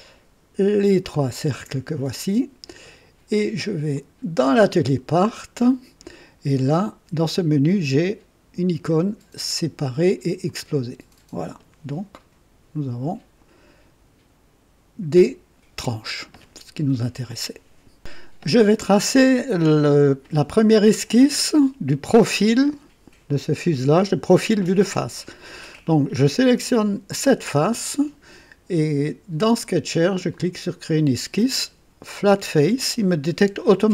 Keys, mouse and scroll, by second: 1.0 ctrl+click, 5.3 click, 6.7 click, 10.4 click, 19.2-20.4 drag, 26.7 click, 30.3 click.